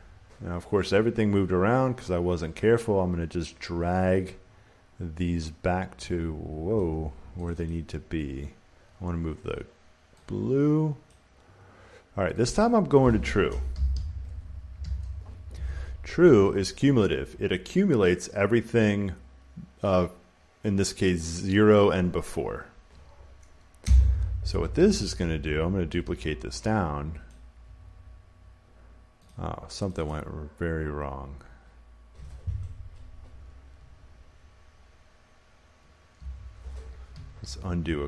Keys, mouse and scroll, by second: 3.3 click, 6.6 click, 7.4 click, 7.6 click, 11.0 click, 12.3 click, 12.5 click, 13.4-15.2 typing, 23.7 Return, 25.0-27.1 drag, 27.2-29.2 drag, 29.8-32.1 drag, 36.1 Escape, 37.5 ctrl+z.